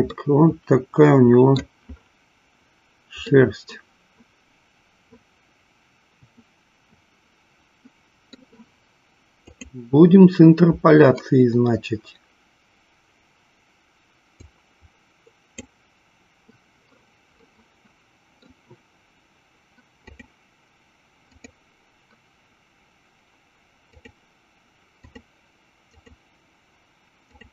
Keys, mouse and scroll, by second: 0.3-1.7 middle drag, 3.5-8.4 middle drag, 10.1 click, 14.4-17.1 drag, 17.9 middle click, 20.2 click, 21.2 click, 23.9 click, 25.0 click, 25.9 click, 27.1 click.